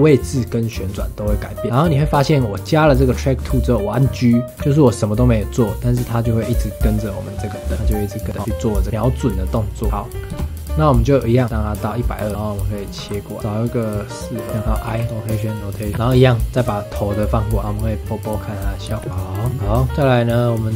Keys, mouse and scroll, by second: 1.6-4.6 middle drag, 4.6 g, 9.9 middle click, 10.3 KP_0, 11.4-12.9 drag, 12.9 g, 15.9 ctrl+c, 16.1 ctrl+v, 16.2-18.8 drag, 18.8 space, 19.1 ctrl+s.